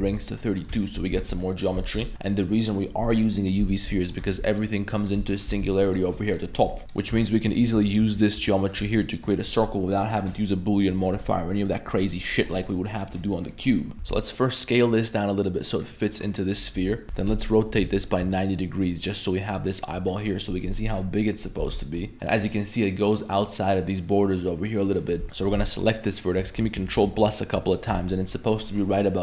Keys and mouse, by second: 0.4 middle click, 0.8 shift+middle drag, 1.2 Tab, 1.4 middle click, 1.8 shift+middle click, 2.1 Tab, 3.3 middle click, 3.7 Tab, 4.0 middle click, 4.3 1, 4.5 right click, 5.2 middle click, 5.5 g, 6.2 middle click, 6.6 middle click, 6.8-8.7 ctrl+KP_Add, 6.8 right click, 12.7-13.1 middle drag, 13.9 Tab, 13.9 a, 13.9 s, 16.1 middle click, 19.2-19.5 middle drag, 20.1 middle click, 20.7 middle click, 21.6 Tab, 21.8 middle click, 25.2 3, 25.6 1, 26.4-27.9 ctrl+KP_Add.